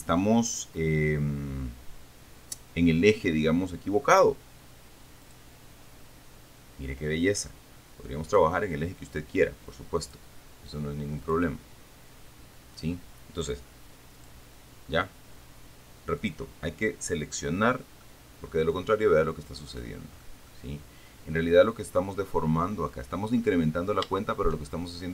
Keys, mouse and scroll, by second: 5.5 click, 8.5 click, 10.3 click, 11.5 click, 14.6 click, 16.5 click, 18.3-19.6 middle drag, 20.9-23.3 middle drag, 23.5-24.1 scroll up 1, 24.1-24.4 scroll up 1, 24.6 shift+middle click.